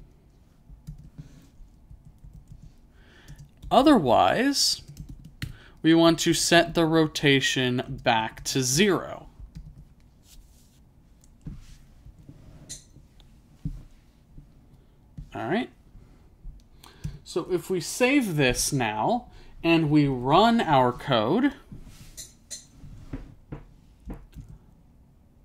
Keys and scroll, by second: 0.0-0.1 typing, 2.0 typing, 3.4-6.1 typing, 8.2 =, 8.8 0.